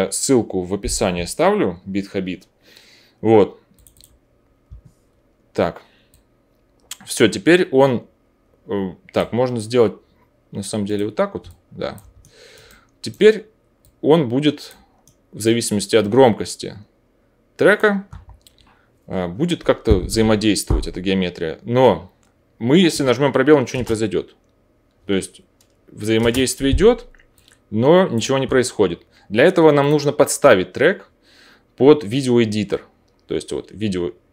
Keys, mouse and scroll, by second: 4.3-6.1 drag, 10.9 click, 12.2 alt+middle click, 17.3-23.7 middle drag, 23.7 space, 26.1 space, 29.8-34.3 drag.